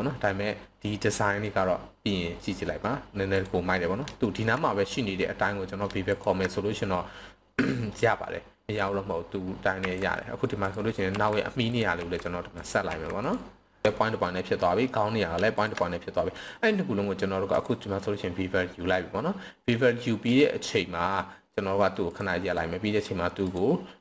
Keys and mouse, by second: 0.0 middle drag, 1.4-2.3 middle drag, 2.8 middle click, 3.3 click, 6.1 shift+click, 7.7 middle click, 9.8 s, 10.6 click, 11.1 s, 11.7 drag, 12.0 s, 12.6 drag, 12.9 s, 13.2 click, 13.8 Escape, 14.2-14.8 middle drag, 16.3-17.6 right drag, 22.1 click, 22.6-24.0 right drag.